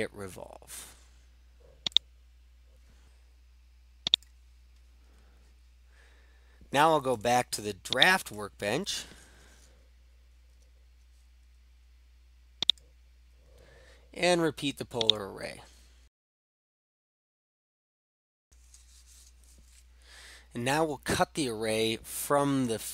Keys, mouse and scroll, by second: 2.0 click, 4.2-5.5 drag, 8.1 click, 12.7 click, 15.1 click, 16.2 click, 16.5 click, 16.6-17.6 typing, 17.5 click, 17.8 click, 18.2 click.